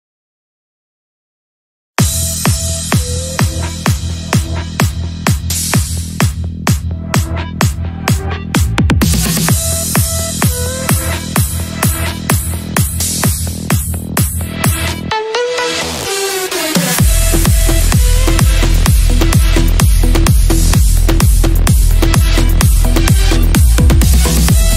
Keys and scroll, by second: 7.2 F3, 10.4 Escape, 16.9 Escape, 18.4 Escape, 19.5 Escape, 20.7 Escape, 23.8 Escape.